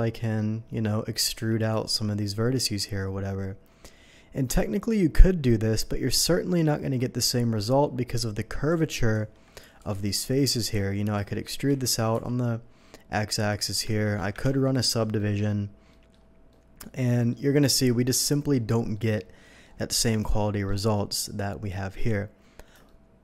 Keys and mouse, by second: 1.3 c, 9.8 Escape, 10.8-11.9 drag, 11.1-12.3 typing, 12.1-23.2 drag, 13.8 Tab, 14.4 Tab, 14.4 ctrl+1.